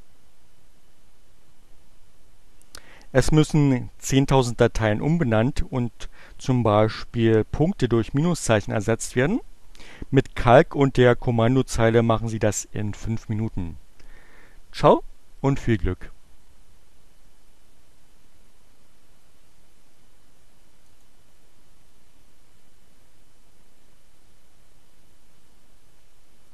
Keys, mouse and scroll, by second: 20.3-21.5 drag, 22.2-24.7 drag.